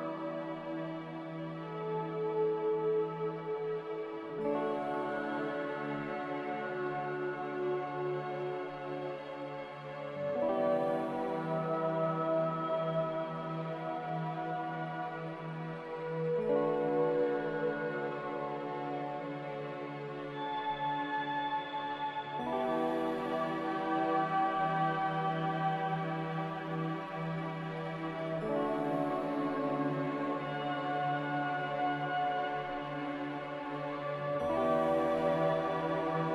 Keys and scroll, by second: 2.5 Delete, 6.1 a, 8.5 ctrl+c, 14.0 z, 16.4 Delete, 18.0 Delete, 19.7 a, 21.2 c, 24.9-25.7 typing, 28.8 a, 30.3 Delete, 32.5 m, 33.5 a, 36.2 ctrl+c.